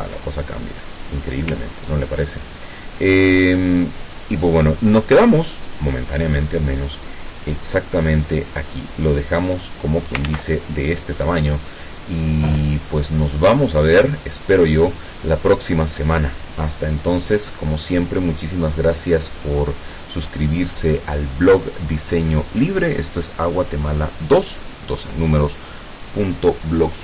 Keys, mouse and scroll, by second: 5.7 click, 7.5-10.4 drag, 10.3 ctrl+z, 11.1 click.